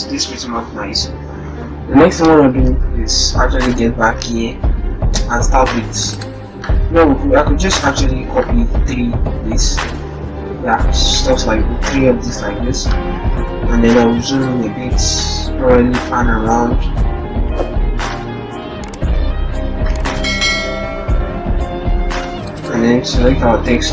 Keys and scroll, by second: 3.0 ctrl+alt+Tab, 11.1 ctrl+c, 11.3 ctrl+c, 11.5 ctrl+c, 11.5 ctrl+c, 11.8 ctrl+c, 12.0 ctrl+c.